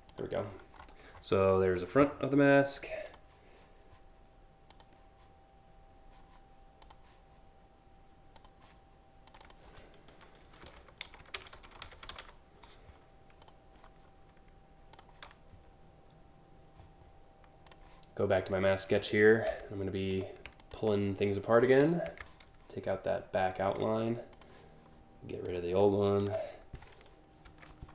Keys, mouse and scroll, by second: 0.1-0.5 scroll up 3, 0.8 scroll down 3, 2.7 click, 4.3 click, 6.4 click, 7.9 click, 8.9 click, 9.0 click, 10.2-12.3 typing, 13.1 click, 14.6 click, 17.3 click, 19.7 click, 20.3 ctrl+click, 21.7 ctrl+c, 23.9 click, 25.1 click, 25.9 Delete, 27.7 ctrl+v.